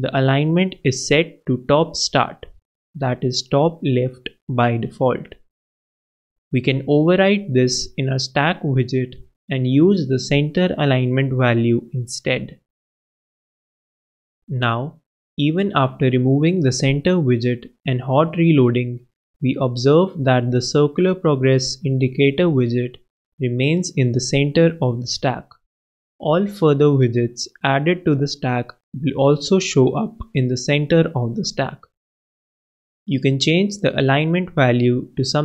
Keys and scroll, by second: 6.7 super+w, 8.5 super+Down, 8.6 super+Right, 12.1-13.0 typing, 16.0 super+Down, 16.1 super+Left, 16.8 alt+super+Return, 17.3 alt+Return, 19.8 super+Return, 20.3 super+s, 22.4 super+Up, 22.5 super+Right.